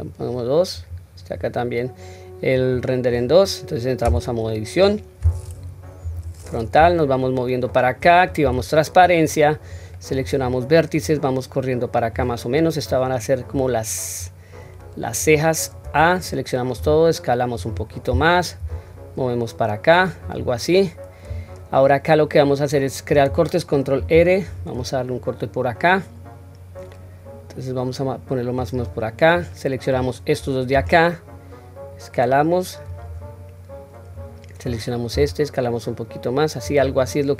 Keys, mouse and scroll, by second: 0.7 click, 2.6 click, 4.0 Tab, 4.8 scroll up 1, 6.0 KP_1, 7.0-7.7 shift+middle drag, 8.4 q, 9.7-10.2 drag, 11.0-12.1 drag, 12.9-13.6 drag, 14.2-15.2 drag, 15.8 a, 16.7 s, 18.6 g, 24.0 ctrl+r, 29.4-30.0 drag, 30.7 s, 34.1 click, 35.1 s.